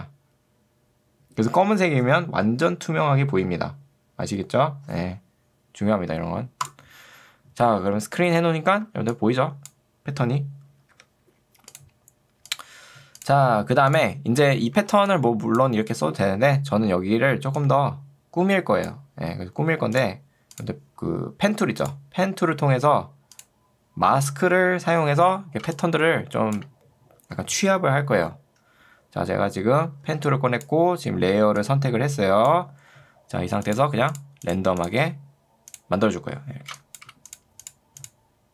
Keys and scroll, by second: 8.9 ctrl+2, 10.9 Escape, 14.9 ctrl+2, 16.3 Escape, 25.7 space, 30.1 ctrl+2, 32.9 Escape, 36.7 space.